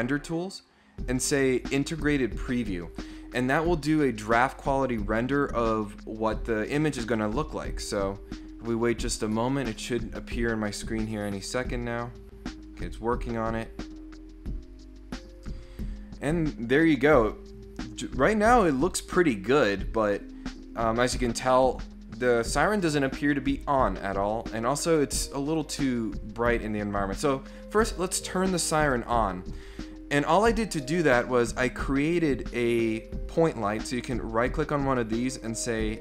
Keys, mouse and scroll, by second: 0.0 click, 1.6 click, 11.3 scroll up 2, 34.1 right click.